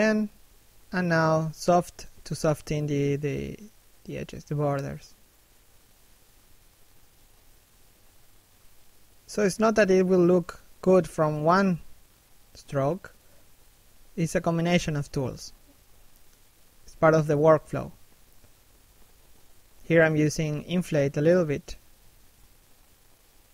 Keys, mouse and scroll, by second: 0.3 click, 0.8 shift+middle click, 1.3 s, 1.4 click, 2.9 shift+middle click, 3.2 click, 3.9 scroll down 1, 4.1 shift+middle click, 4.5 click, 5.9 shift+middle click, 6.3 click, 7.8 shift+middle click, 8.2 click, 8.8 scroll down 1, 9.1 middle click, 11.8 shift+middle click, 12.0 middle click, 12.3 scroll up 1, 12.5 middle click, 12.9 shift+middle click, 13.1-14.1 scroll up 1, 14.1 i, 14.7 f, 15.1 click, 16.8 click, 19.9 click, 20.7 click, 21.2 shift+middle click, 21.6 click, 22.4 click, 23.0 click, 23.4 scroll down 1.